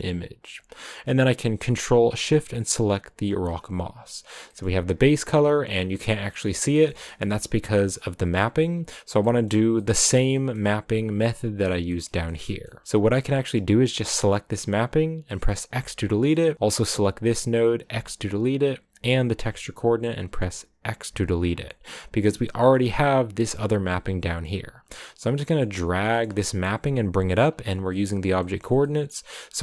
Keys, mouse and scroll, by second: 0.0-1.1 drag, 1.1-2.7 middle drag, 2.7 ctrl+shift+click, 7.8 a, 14.2-15.6 drag, 15.6 x, 16.9 click, 17.8 x, 19.2-21.0 drag, 21.0 x, 23.7-29.6 drag.